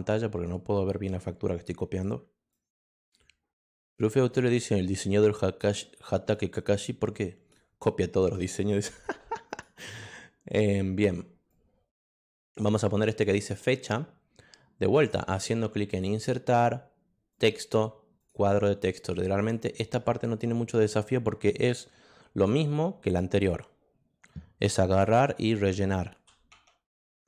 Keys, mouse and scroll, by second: 2.5-3.9 drag, 8.4 click, 9.5 click, 11.5 click, 13.4 click, 15.0 click, 15.9 click, 17.3 click, 18.2 click, 19.3 click, 24.9 f, 26.1-27.2 typing.